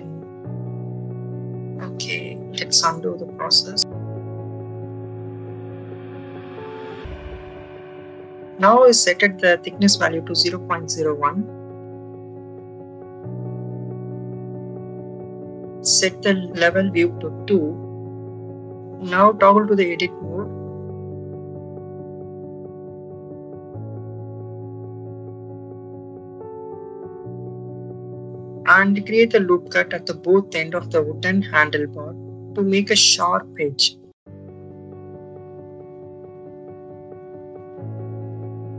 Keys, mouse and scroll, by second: 2.6-4.0 drag, 4.4 ctrl+z, 5.4-9.5 drag, 8.4 BackSpace, 12.1 click, 14.4-15.4 drag, 17.5 click, 20.0 Tab, 23.5 right click, 23.9 ctrl+z, 25.6 click, 26.4 Tab, 27.1 click, 29.0 ctrl+r, 31.6 right click, 32.5-34.0 drag, 34.3 shift+middle click, 35.5 ctrl+r, 38.4 click.